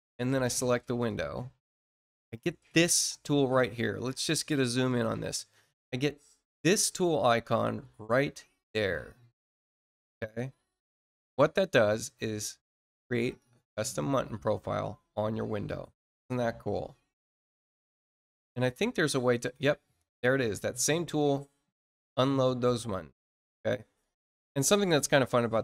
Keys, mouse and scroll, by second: 0.2 click, 4.8 click, 11.9 click, 21.1 click, 24.7 click.